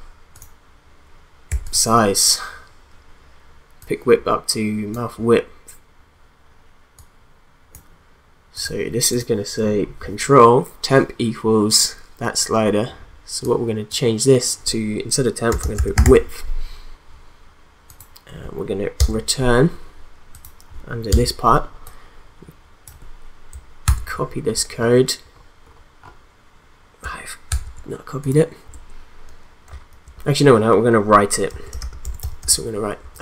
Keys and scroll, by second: 15.2-16.5 typing, 19.0 Return, 21.1 Return, 23.9 ctrl+x, 27.5 ctrl+z, 31.2-33.2 typing.